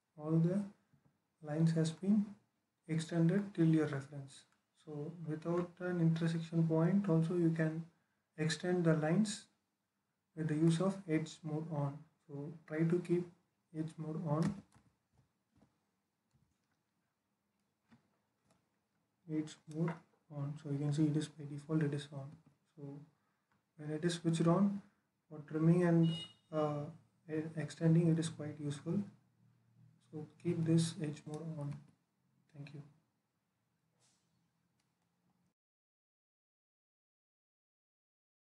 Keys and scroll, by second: 0.7 Escape, 14.3-16.1 typing, 18.2 BackSpace, 22.2 Escape, 31.6 Escape.